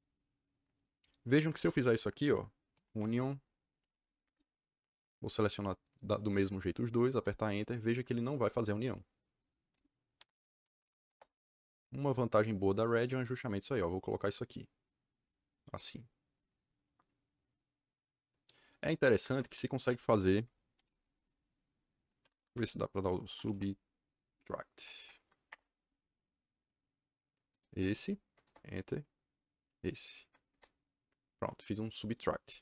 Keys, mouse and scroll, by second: 1.3 Escape, 1.5 Escape, 2.4-4.2 typing, 5.3 click, 5.7 click, 7.0 KP_Enter, 10.1 c, 10.6 Escape, 10.8 m, 11.0 Return, 12.3 click, 12.6 click, 12.9 right click, 13.2 click, 18.6 click, 19.1 Escape, 19.2 Escape, 19.4 Escape, 20.4-21.3 typing, 22.1 Escape, 22.3 Escape, 22.9-24.0 typing, 24.7 Down, 24.9 Up, 25.4 Return, 27.4 click, 28.4 KP_Enter, 29.7 click, 30.4 KP_Enter.